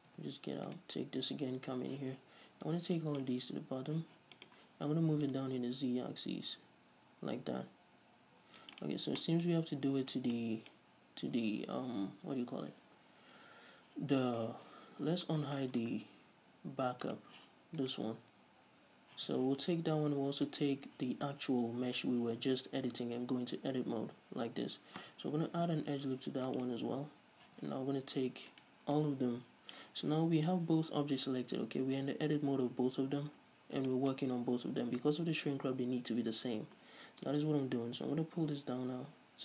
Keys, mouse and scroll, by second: 0.3 Tab, 0.8 right click, 1.4 Tab, 2.1 z, 2.8 click, 4.0 z, 4.5 middle click, 5.4-8.9 drag, 8.9 shift+right click, 9.3-15.2 middle drag, 14.7 Tab, 15.2-17.2 scroll down 1, 17.2 click, 18.0 right click, 19.3 z, 20.8-21.1 shift+right drag, 21.6 z, 23.1 Tab, 23.1-25.8 middle drag, 24.2-25.5 scroll up 2, 25.5 ctrl+r, 26.8 right click, 27.6 z, 28.0-28.4 scroll down 2, 28.7 right click, 29.1 click, 30.3 z, 33.7-34.1 scroll up 2, 34.1-37.5 shift+middle drag, 37.5-39.4 drag.